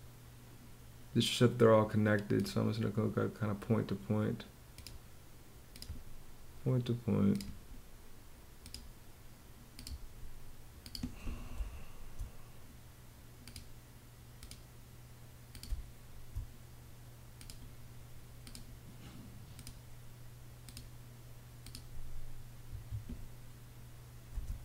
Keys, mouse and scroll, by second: 11.1 space, 15.2 space, 22.2 Escape, 23.8 space.